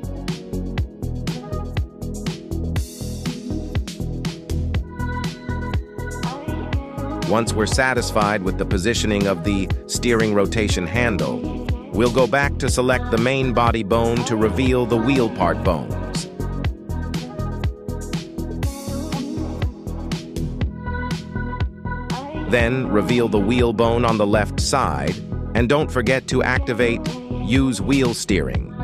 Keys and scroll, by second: 0.9 g, 8.3 z, 20.7 Escape, 28.1 g, 28.3 Tab.